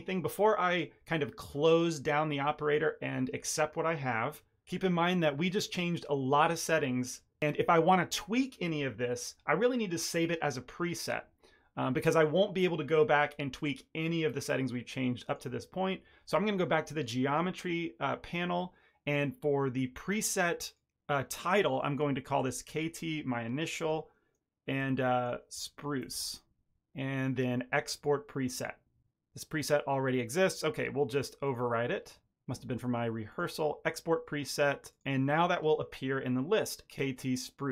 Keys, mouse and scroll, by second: 15.2 click, 20.6 click, 28.5 click, 31.4 click, 33.3 click, 34.9 click.